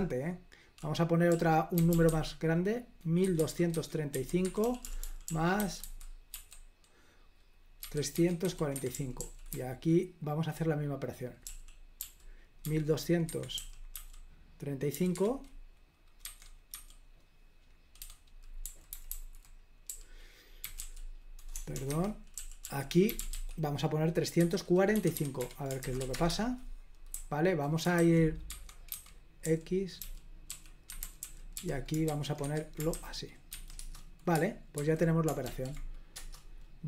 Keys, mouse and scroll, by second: 0.0-15.0 typing, 13.3 Escape, 15.2 Escape, 16.3-16.8 typing, 18.1-34.6 typing, 22.0 Escape, 34.8 super+h, 35.5 ctrl+p, 36.2 Return.